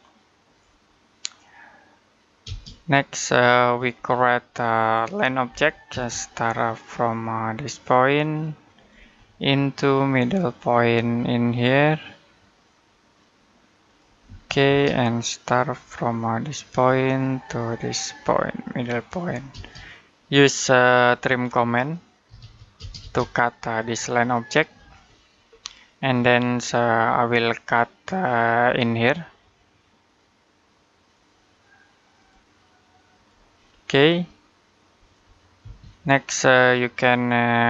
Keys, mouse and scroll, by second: 2.3 space, 3.8-4.2 scroll down 1, 4.2 middle click, 4.6-5.3 scroll up 1, 5.3 l, 5.7 space, 8.6 click, 9.1 middle click, 13.7 click, 14.1 space, 16.5 click, 19.4 space, 20.7 middle click, 21.0-22.1 scroll up 1, 22.1-22.6 typing, 23.6 click, 25.3-26.0 scroll up 1, 26.0 middle click, 30.9 click, 33.5-34.9 scroll down 1, 34.9 click, 35.5 space, 36.1-36.5 scroll down 1, 36.5 middle click.